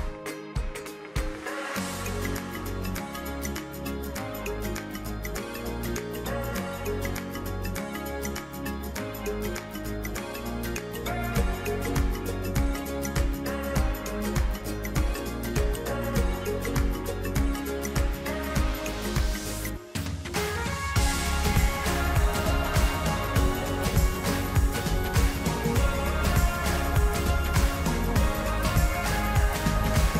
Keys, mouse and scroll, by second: 0.3-2.4 middle drag, 4.4-6.5 middle drag, 7.9 click, 9.7-11.7 middle drag, 15.9 scroll down 3, 16.4-17.6 middle drag, 17.6 e, 20.5-22.6 drag, 24.5-26.5 drag, 28.5 click.